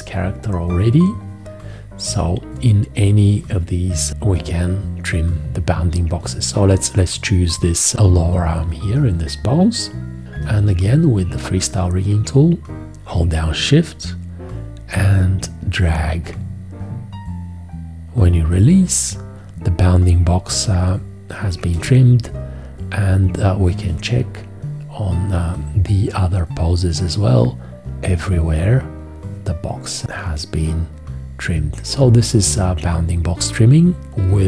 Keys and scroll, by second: 10.4 F4, 21.7 v.